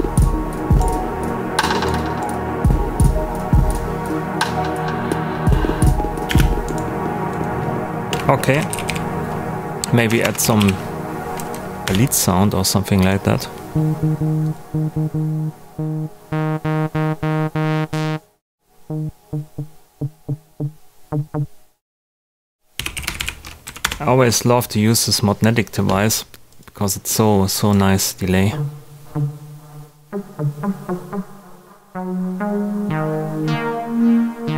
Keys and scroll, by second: 6.2 space, 8.2-11.0 typing, 11.3 Down, 11.8 Return, 22.5-23.6 typing, 23.8 Return.